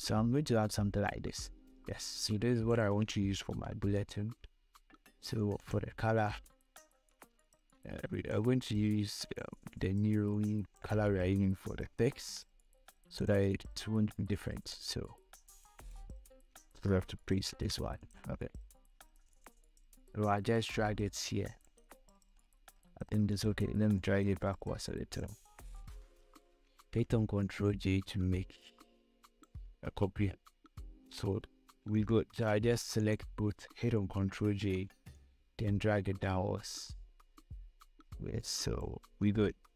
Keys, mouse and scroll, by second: 3.9 v, 5.6 click, 8.8 ctrl+v, 9.6-12.4 drag, 12.4 ctrl+c, 13.5 click, 17.7 ctrl+v, 18.2-22.4 drag, 21.1-22.3 drag, 22.4 scroll down 1, 23.0 scroll up 1, 24.3-25.8 shift+drag, 25.8 scroll down 1, 26.9 ctrl+j, 27.8-31.7 shift+drag, 31.7 Down, 33.3 ctrl+click, 34.7 ctrl+j, 35.9-39.7 shift+drag.